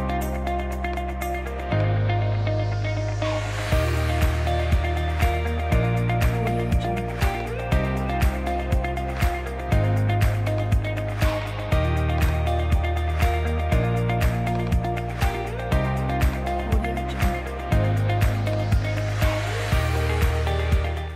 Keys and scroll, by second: 4.0 super+z.